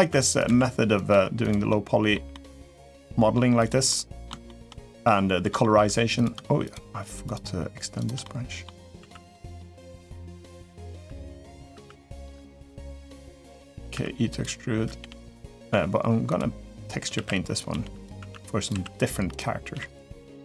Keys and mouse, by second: 0.5 s, 0.9 g, 1.4 middle click, 2.1 middle click, 2.8 middle click, 3.4 click, 3.6 middle click, 4.0 shift+middle click, 4.6 middle click, 5.2 shift+middle click, 5.9 click, 6.4 shift+click, 7.0 shift+click, 8.0 middle click, 8.7 s, 9.2 middle click, 9.7 r, 10.8 e, 11.5 s, 12.0 r, 12.6 g, 13.3 middle click, 13.7 e, 14.7 g, 15.6 e, 16.9-19.5 typing.